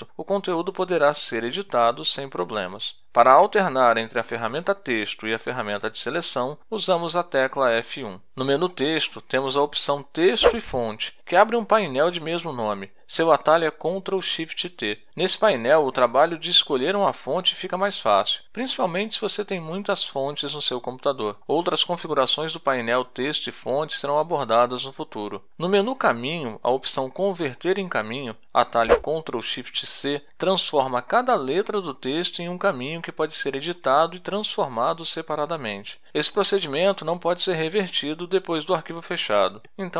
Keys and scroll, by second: 0.0-2.2 typing, 4.7 F1, 7.4 t, 8.7 F1, 12.4 ctrl+shift+t.